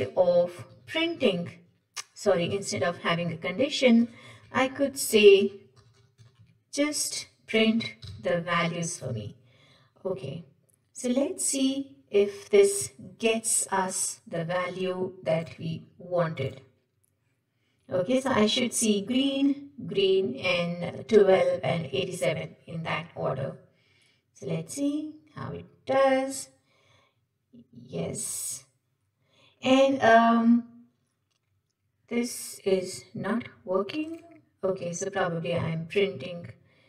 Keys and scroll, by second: 3.3 Delete, 4.4 Tab, 6.5 Tab, 9.5 Escape.